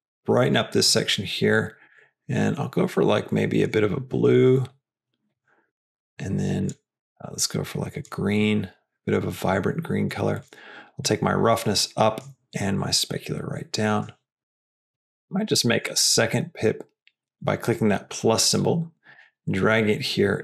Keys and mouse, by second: 6.9 click, 10.3 click, 11.0-12.1 drag, 12.7-13.8 drag, 14.4 click, 15.8 click, 18.4-19.1 drag.